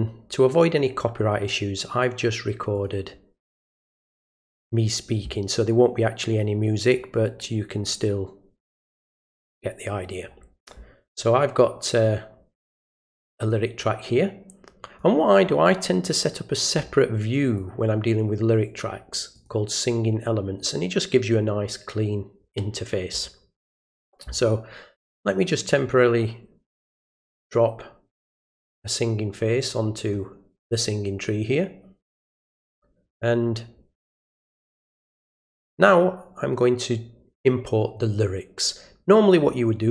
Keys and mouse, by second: 2.7 click, 3.9 click, 6.8 click, 8.6 click, 13.5-15.0 drag, 17.5 click, 19.3 click, 25.1-27.1 drag, 28.3-30.0 drag, 34.7 click, 39.3 click.